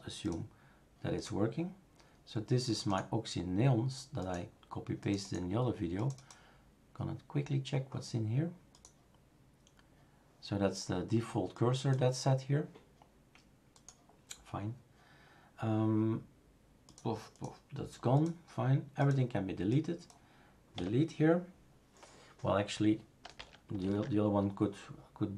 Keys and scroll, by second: 20.7 Delete, 23.8 ctrl+z.